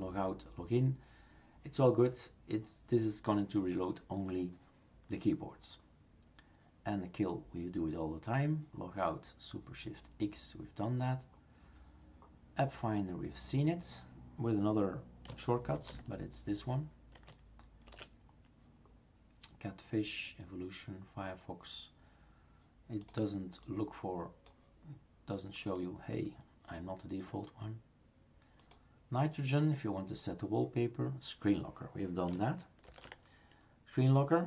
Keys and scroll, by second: 15.7 ctrl+alt+a, 17.8 shift+super+q.